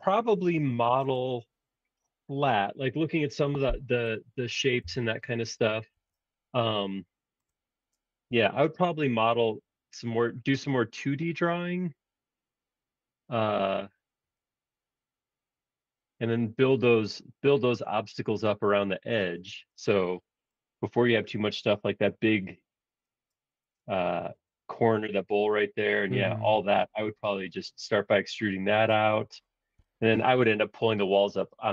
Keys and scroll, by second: 4.8 BackSpace, 5.9 super+1.